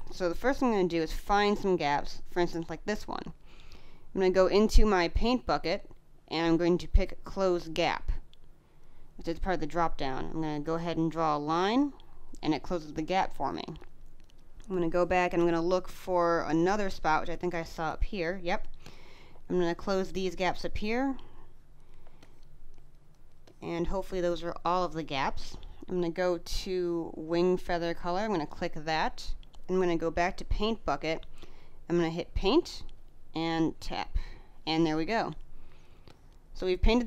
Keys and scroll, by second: 12.9 space, 21.9 space, 34.8 space.